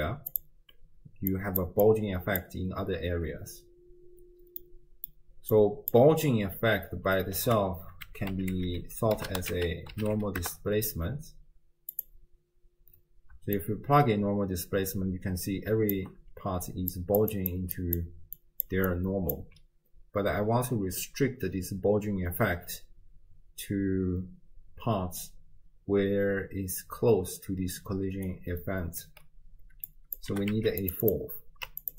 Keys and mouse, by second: 1.0 d, 1.3 click, 1.7 d, 1.9 click, 1.9-2.7 d, 4.6 click, 5.5 click, 7.4 ctrl+a, 13.6-16.0 shift+drag, 16.7-19.4 typing, 17.0 click, 17.3 click, 17.7 click, 18.4 click, 18.9 click, 28.0 d, 28.3 right click, 29.1 d, 29.1 d, 29.9 click, 30.3 g, 31.1 click, 31.8 ctrl+shift+click.